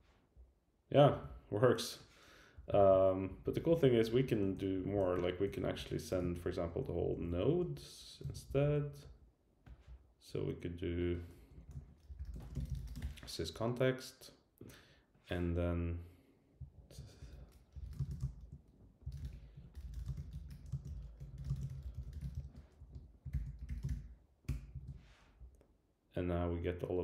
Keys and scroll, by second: 2.5 Up, 2.8 super+Down, 3.3 Down, 5.0 super+Right, 6.1 alt+Right, 7.0 alt+Left, 7.6 Up, 8.2 super+Right, 8.5 Left, 8.8 alt+Right, 11.3 alt+Right, 11.6 alt+shift+Left, 16.7 super+Right, 17.2 Return, 17.3 Tab, 19.3 Return, 19.5 Tab, 22.8 Up, 23.3 super+k, 24.5 Return.